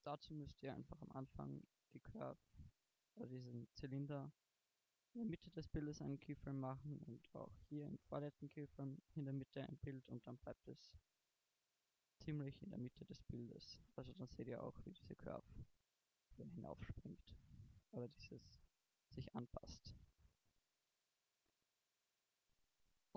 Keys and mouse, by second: 0.7 shift+Left, 5.5-7.1 middle drag, 7.7-9.0 middle drag, 11.6 shift+Left, 12.2 alt+a.